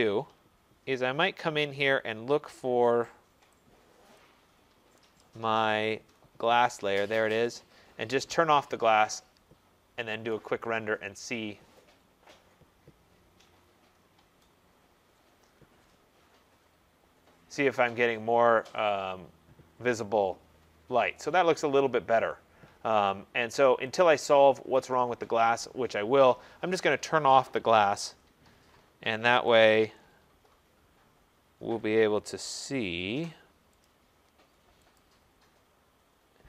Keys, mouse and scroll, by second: 0.1-3.6 drag, 4.3 click, 5.4-6.2 scroll, 7.5 click, 10.4 click, 24.1 click, 24.9 click, 27.9 middle click, 28.0 middle click, 28.1 middle click, 29.7 click, 31.7 scroll, 32.3 middle click, 33.9 click, 35.1 click.